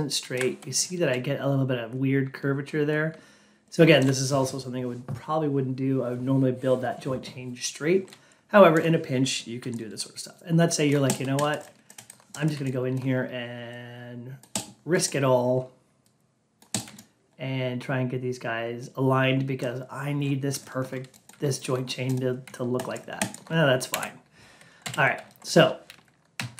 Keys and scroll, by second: 23.8 F8, 26.2 Down.